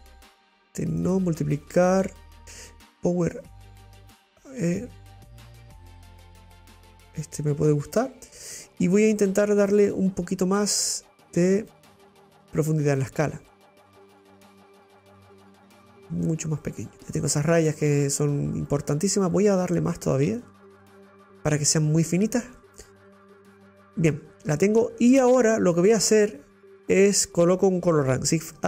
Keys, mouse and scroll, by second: 4.8-9.3 drag, 9.3 middle click, 10.1-11.3 drag, 14.0-16.0 drag, 16.9 middle click, 17.4 click, 20.5-22.7 drag, 22.8-23.5 scroll up 5, 24.0-24.6 scroll down 5, 26.0 click, 26.8 click.